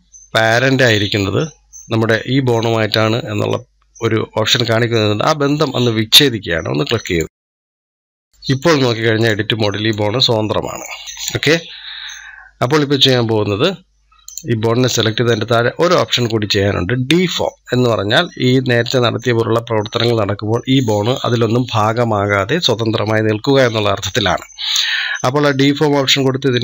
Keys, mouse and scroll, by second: 6.8-11.0 drag, 11.0 ctrl+z, 14.1 click, 15.1 scroll down 2, 16.8 scroll down 2.